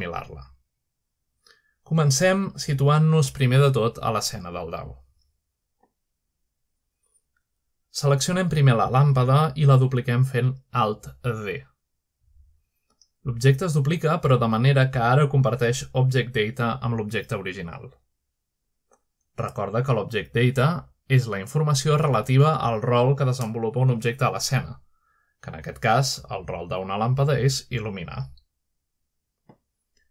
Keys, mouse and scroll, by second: 1.4-2.2 scroll up 1, 1.8-2.2 shift+middle drag, 2.6-2.9 shift+middle drag, 2.6-3.2 scroll up 1, 3.2-4.0 shift+middle drag, 4.8-5.2 middle drag, 5.8-7.2 shift+middle drag, 8.0 click, 9.0 click, 11.2-11.8 scroll down 1, 11.8-12.4 middle drag, 12.4 click, 12.7-13.0 drag, 13.4-13.7 middle drag, 13.7 scroll down 1, 18.2 click, 20.7-21.4 shift+middle drag, 21.2-21.5 scroll up 2, 21.8-22.4 shift+middle drag, 22.8-23.4 shift+middle drag, 24.3 middle drag, 24.8 shift+middle click, 26.8 click.